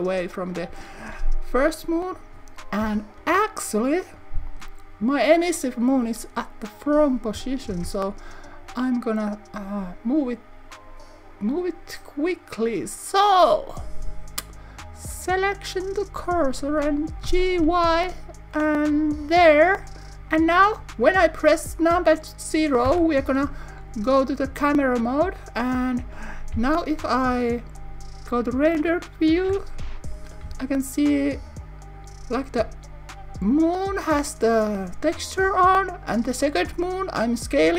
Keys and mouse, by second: 3.2 KP_7, 4.5 click, 7.7 shift+s, 17.6 y, 19.3 click, 22.8 KP_0, 26.5 z, 31.9 s.